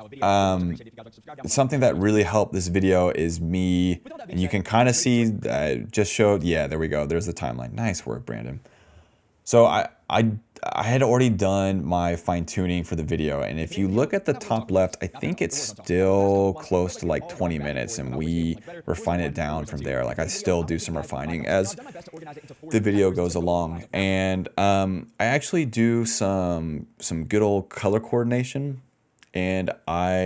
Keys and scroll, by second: 1.5-6.3 typing, 2.5 ctrl+x, 6.9 ctrl+shift+v, 7.7 d, 7.8 d, 7.9 d, 8.0 d, 11.4 d, 11.7 ctrl+s, 13.5 space, 18.7 d, 20.6 d, 21.1 s, 22.0 s, 22.5 d, 24.0 space.